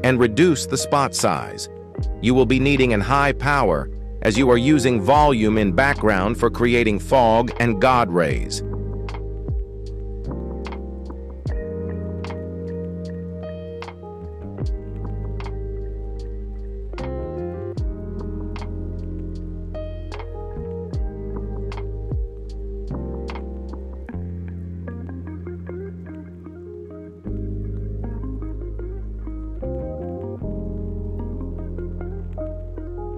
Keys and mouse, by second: 1.8 shift+middle click, 4.6 s, 9.0-12.2 drag, 13.2 g, 15.1 z, 15.1 z, 15.2 z, 15.5-15.8 middle drag, 16.5 g, 18.9 middle click, 19.7-20.4 middle drag, 21.7-23.4 shift+drag, 24.1 shift+middle click, 24.6 g, 28.4 g, 30.0 z, 30.1 z, 30.2 z, 30.9-33.1 drag.